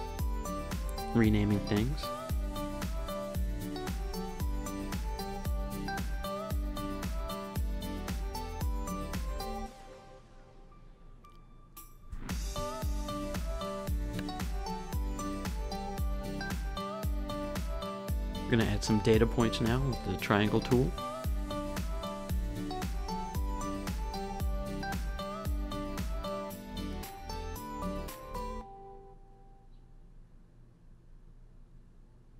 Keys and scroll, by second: 0.1-1.0 typing, 16.3 super+z, 29.6 Up, 29.9 Down, 31.4 Up, 32.0 Left, 32.2 Up.